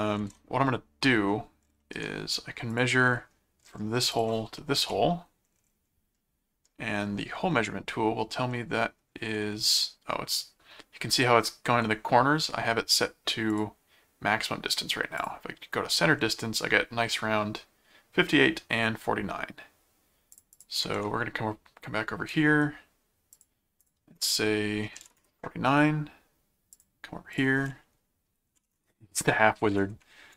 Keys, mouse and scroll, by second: 0.2 ctrl+Tab, 1.8 middle click, 2.7 click, 4.1 ctrl+click, 4.8 m, 6.2 middle click, 8.5 middle click, 13.5 click, 15.2 click, 20.3 click, 20.9 ctrl+Tab, 22.3 right click, 23.3 click, 26.7 click, 27.4 click.